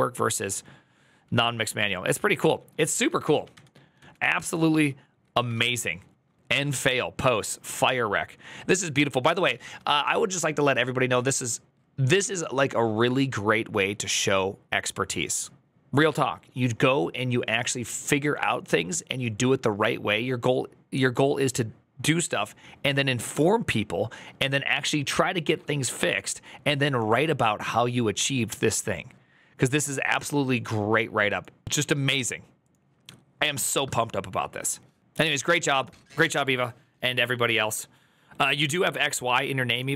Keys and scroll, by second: 1.0 alt+[, 2.3 alt++, 3.1 ctrl+l, 3.3 ctrl+c, 3.8 alt+[, 5.2 ctrl+v, 5.4 Return, 9.2 alt+[, 9.7 alt++.